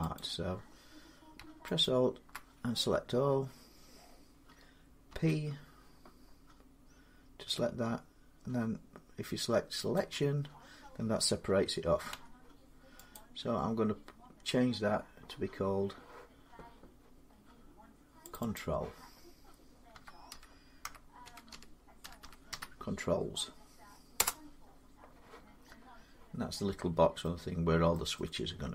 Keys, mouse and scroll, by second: 0.0 click, 1.6 alt+click, 4.9 p, 9.8 click, 11.9 Tab, 12.9 click, 17.1 scroll down 2, 18.1 click, 18.3 click, 19.7-22.3 typing, 23.9 Return, 26.5 middle click, 26.9 middle click, 27.7 middle click, 28.6 middle click.